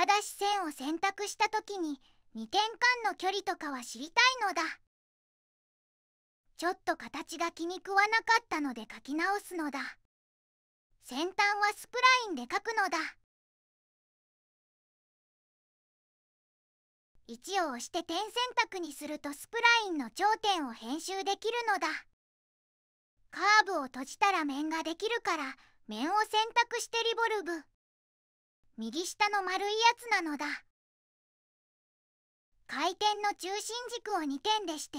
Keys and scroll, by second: 17.1 Escape, 18.1 1, 29.3 3.